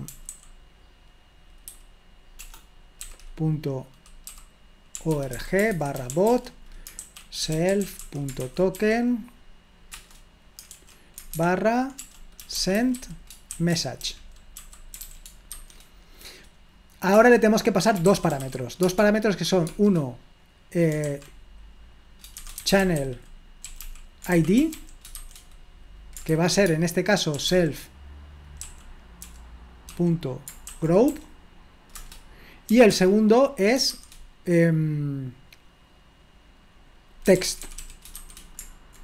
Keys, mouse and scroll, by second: 0.0-1.7 typing, 2.8-3.5 typing, 4.9-9.2 typing, 9.9 Return, 10.7-15.5 typing, 17.2 Return, 17.8-19.7 typing, 21.1 typing, 22.5-25.6 typing, 27.1-28.6 typing, 30.9-31.6 typing, 32.0 Return, 37.0-38.6 typing.